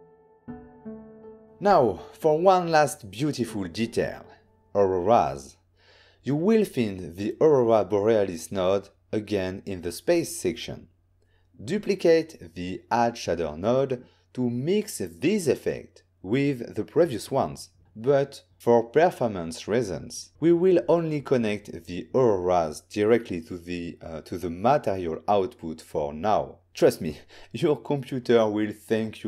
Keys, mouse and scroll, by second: 5.9 n, 6.3 click, 8.3 click, 9.9 n, 10.5 middle click, 11.6 click, 13.0 click, 13.2 click, 13.9 shift+d, 15.6 click, 16.4 click, 20.0 click, 24.1 middle click, 26.4 z.